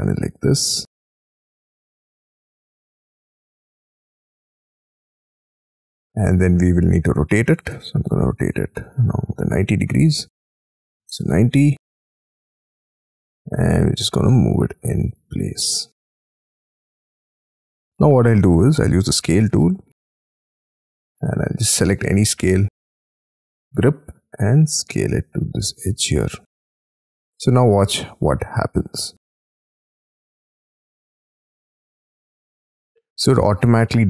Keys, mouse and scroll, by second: 0.8 middle click, 2.8 middle click, 6.0-6.8 scroll up 12, 6.5 space, 6.9 q, 8.2 Right, 8.5 Left, 10.3-12.4 typing, 11.4-11.9 scroll down 13, 15.1 shift+click, 15.3-15.9 scroll up 9, 18.1-18.5 scroll down 10, 18.9 middle click, 19.1-19.7 scroll down 10, 19.2 s, 22.3 middle click, 23.0-23.6 scroll up 13, 23.6 middle click, 33.2 middle click, 33.6 scroll down 6.